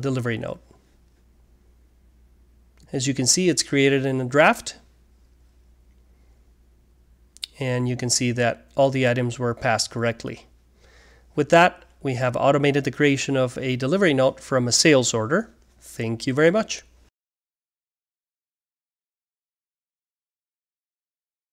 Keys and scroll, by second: 2.3 typing.